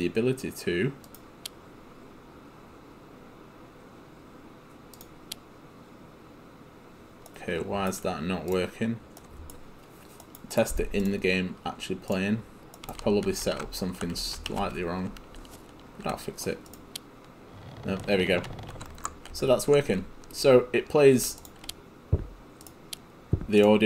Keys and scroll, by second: 12.7-15.2 typing, 18.5 s, 20.4 ctrl+w.